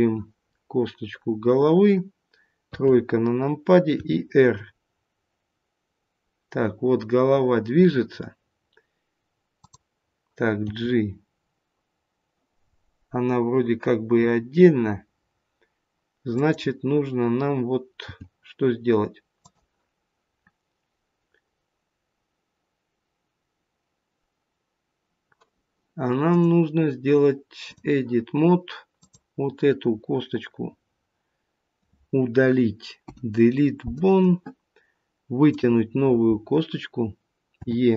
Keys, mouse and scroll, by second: 0.6 click, 0.6 scroll up 1, 2.6 KP_3, 3.9 r, 10.6 g, 18.0 g, 26.3 click, 28.9 click, 33.0 Delete, 35.4 click, 37.5 e.